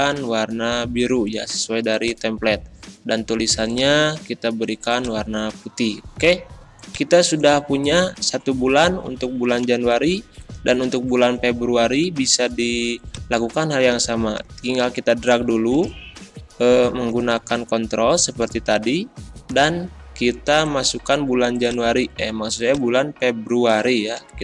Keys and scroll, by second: 9.0 Up, 17.2 Up, 24.2 ctrl+c.